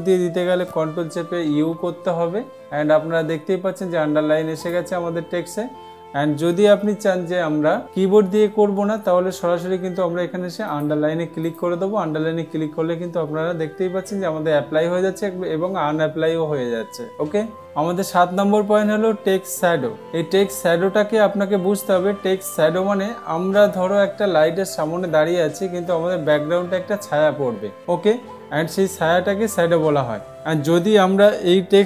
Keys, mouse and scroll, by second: 2.1 ctrl+u, 5.2 click, 7.7 ctrl+a, 11.3-13.0 drag.